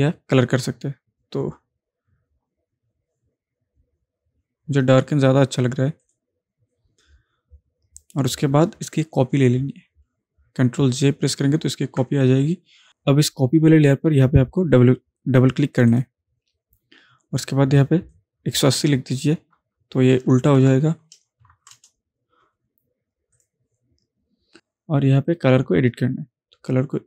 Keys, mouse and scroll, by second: 6.1 click, 11.9 ctrl+j, 15.8 click, 15.8 click, 18.2-18.8 drag, 23.4-27.0 drag.